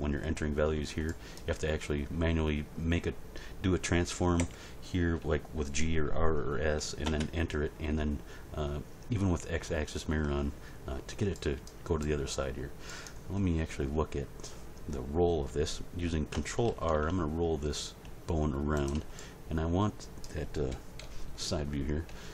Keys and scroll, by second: 4.4 g, 7.0 Return, 16.7 ctrl+r, 20.7 End, 21.0 Page_Down.